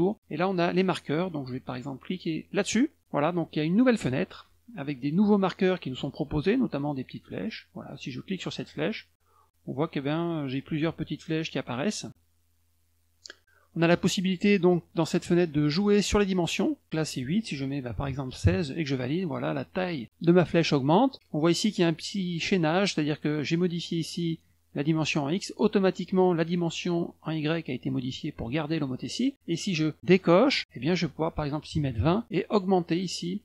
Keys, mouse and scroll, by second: 2.6 click, 8.3 click, 16.9 click, 23.6 click, 30.1 click, 30.6 click.